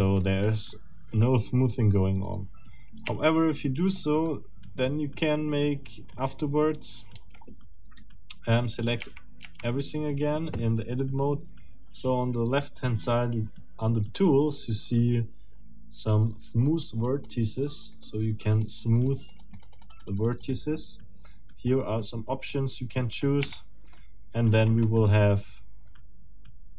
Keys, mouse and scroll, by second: 0.5 middle click, 2.2 middle click, 3.0 Tab, 4.0 middle click, 5.5 scroll down 2, 6.1 scroll down 2, 7.2 Tab, 9.0 Tab, 17.0 click, 17.9 click, 18.5 click, 19.0 click, 23.4 Tab, 23.9 middle click, 24.6-25.0 scroll up 2, 25.2-26.7 middle drag.